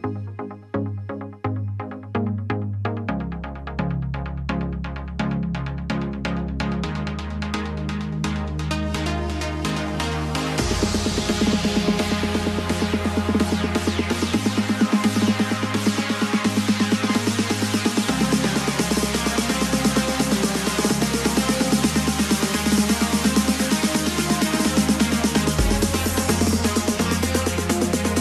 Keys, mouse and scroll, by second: 0.2-2.7 drag, 2.7 ctrl+KP_Add, 3.0 ctrl+KP_Add, 3.3 ctrl+KP_Add, 3.7 ctrl+KP_Add, 4.0 ctrl+KP_Add, 4.3 ctrl+KP_Add, 4.5 ctrl+KP_Add, 5.0 ctrl+KP_Add, 5.4 ctrl+KP_Add, 7.0 ctrl+KP_Subtract, 9.5 z, 12.5 g, 16.7 r, 19.6 g, 23.5 r, 26.9-28.2 alt+drag.